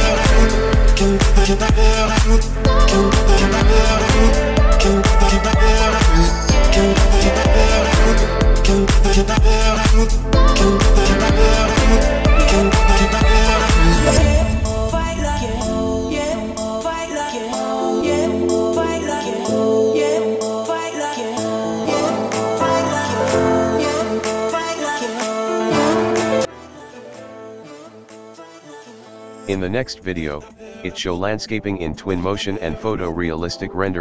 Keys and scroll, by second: 2.2 Escape, 5.4 Escape, 6.6 o, 8.7 Escape, 9.7 Escape, 14.4 Return, 18.6 Return, 19.1 Escape, 19.6 o, 25.3 Escape, 26.6 Escape, 27.3 Escape, 32.9 Escape, 33.4 o.